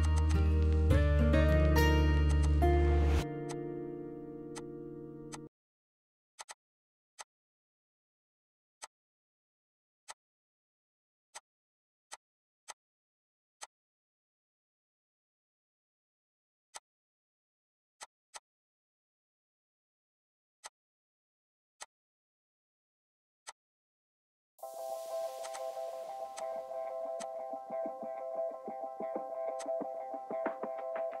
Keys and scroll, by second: 1.7 ctrl+g, 3.5 Escape, 4.1 m, 6.8 p, 9.3 Escape, 9.8 l, 11.7 m, 14.5-14.9 typing, 21.3 m, 23.8 ▯, 27.2-30.9 typing.